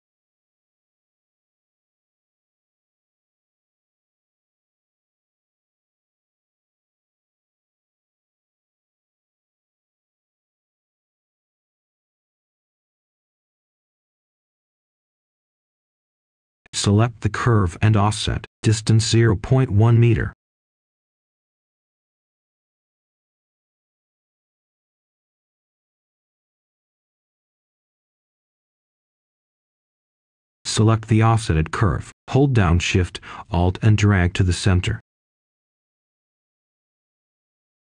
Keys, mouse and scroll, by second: 0.4 right click, 1.0-1.6 scroll up 1, 1.6-4.6 drag, 4.8-5.1 scroll down 1, 5.1-5.8 scroll up 1, 5.8-9.6 drag, 9.7 right click, 10.5 click, 11.0 scroll up 1, 11.8-14.3 drag, 14.8-15.9 scroll down 1, 15.9 right click, 16.7-17.9 drag, 18.0 typing, 19.5 Return, 21.4 click, 22.7 Return, 24.9 click, 25.4-26.6 scroll up 1, 26.6-27.3 scroll down 1, 27.3 click, 27.8 right click, 29.8 click, 33.1-37.9 alt+shift+drag.